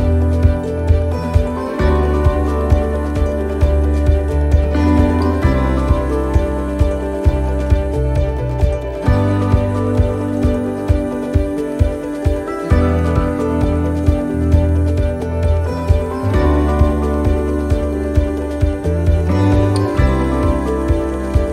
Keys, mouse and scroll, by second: 0.7 middle click, 3.4 right click, 4.6 l, 5.2 middle click, 6.4 click, 8.3 click, 9.8 middle click, 11.4 middle click, 11.6-12.0 scroll down 1, 12.0 middle click, 14.0 l, 15.1 middle click, 15.1 l, 16.3 shift+d, 17.4 r, 20.8 click.